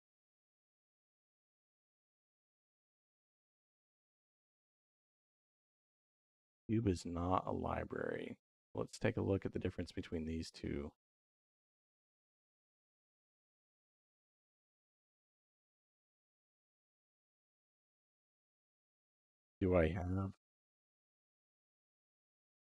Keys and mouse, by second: 1.6-4.0 drag, 2.7 BackSpace, 3.0 BackSpace, 3.2 BackSpace, 4.8-7.8 drag, 8.3 middle click, 9.2 middle click, 12.3 click, 16.1-17.2 drag, 17.6 middle click.